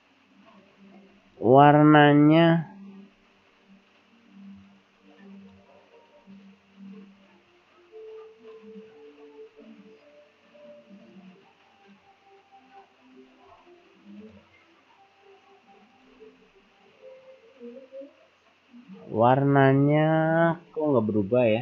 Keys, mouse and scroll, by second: 1.4 click, 2.3-3.0 scroll down 4, 3.2-4.3 scroll down 4, 4.3-4.6 scroll down 1, 4.6 click, 5.4 click, 6.2-7.1 scroll down 2, 8.5 right click, 9.5-10.0 scroll down 2, 11.8 right click, 13.5-13.9 scroll up 3, 14.3 click, 16.0 click, 16.6-18.7 scroll up 2.